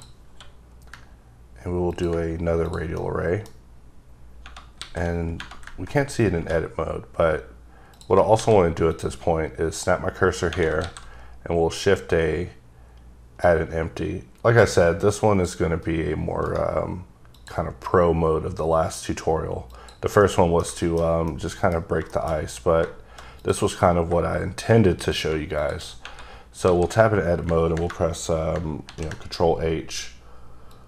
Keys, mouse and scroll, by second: 0.2 q, 1.9 ctrl+click, 2.9 middle click, 3.5-4.4 scroll up 1, 4.8 a, 7.2 scroll up 2, 7.9 click, 8.4 shift+s, 8.9 click, 10.8 shift+a, 13.4 click, 16.4 right click, 17.3 click, 19.7 click, 20.2 middle click, 20.9-21.2 shift+scroll down 2, 21.2 middle click, 21.7-22.1 scroll up 3, 22.1 shift+middle click, 22.3-22.8 scroll down 2, 23.3 click, 24.9 click, 25.5 click, 26.1-26.4 scroll up 2, 26.6 a, 28.8 ctrl+h, 30.7 click.